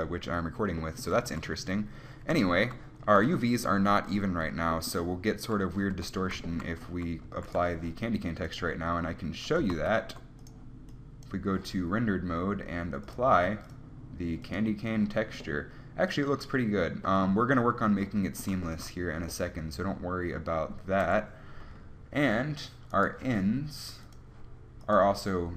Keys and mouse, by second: 1.4 a, 6.2 Tab, 7.0 z, 7.4 z, 9.9 ctrl+z, 13.3 click, 17.4-18.5 middle drag, 19.0-20.6 middle drag, 21.2 KP_1, 24.2-25.5 middle drag.